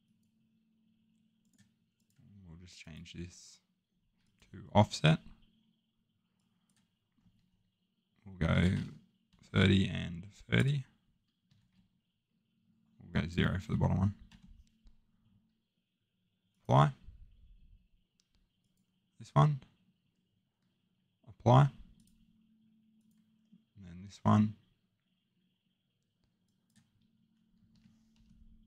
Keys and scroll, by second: 8.2-9.3 typing, 11.4 typing, 14.0-14.8 typing, 27.4-28.2 typing.